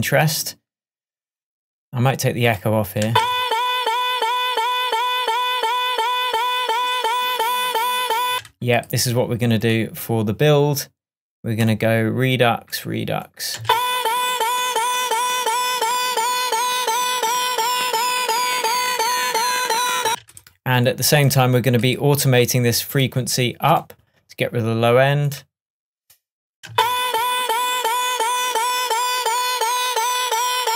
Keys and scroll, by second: 3.1 space, 8.4 space, 13.7 space, 20.1 space, 26.8 space.